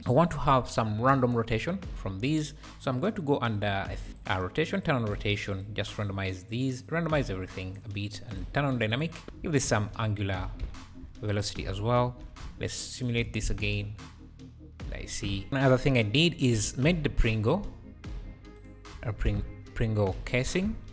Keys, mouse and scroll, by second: 0.0 shift+right click, 0.5 space, 1.3 space, 4.0 scroll up 1, 4.1 click, 5.6-8.5 drag, 8.9-10.7 drag, 12.1 alt+a, 12.8 shift+right click, 13.3 alt+a, 13.5 space, 15.3 Escape, 15.5 shift+Right, 15.5 shift+a, 16.7 shift+a, 18.6 shift+a, 19.1 s, 19.2 s, 20.6 s.